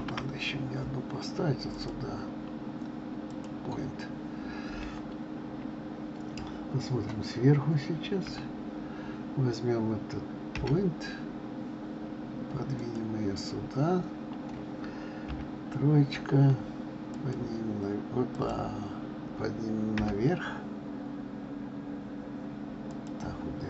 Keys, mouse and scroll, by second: 0.1 shift+a, 8.4 KP_7, 10.7 g, 15.4 KP_3, 17.2 click, 18.6 click, 20.1 g.